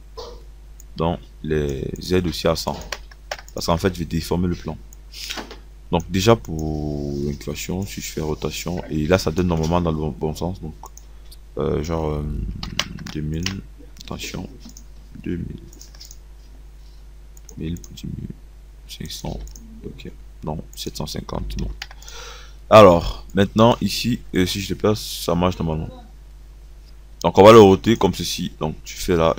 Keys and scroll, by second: 12.5 KP_2, 12.6 KP_0, 13.3 KP_0, 17.7 1, 19.5 5, 21.9 0, 27.1 KP_0.